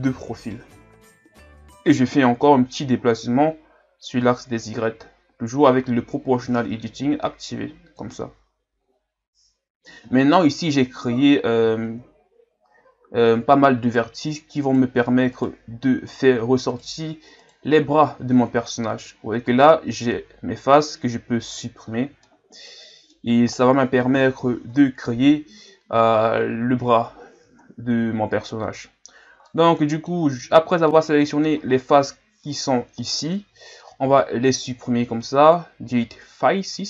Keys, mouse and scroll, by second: 2.7-8.3 drag, 8.7-9.3 scroll down 1, 9.3-9.6 scroll up 3, 10.6-11.8 right drag, 11.8-13.6 shift+scroll up 4, 13.8-17.9 right drag, 17.9-18.7 scroll down 4, 18.7 scroll up 3, 19.7 scroll up 2, 21.8-22.2 scroll down 5, 22.2-24.1 middle drag, 24.1 KP_1, 25.7-26.8 scroll up 3, 26.8-27.6 scroll up 4, 27.6-28.3 scroll down 2, 28.3-29.2 scroll down 1, 29.2-29.5 scroll down 3, 29.5 middle click, 30.2-30.9 scroll up 5, 30.9-34.0 middle drag, 34.0 x.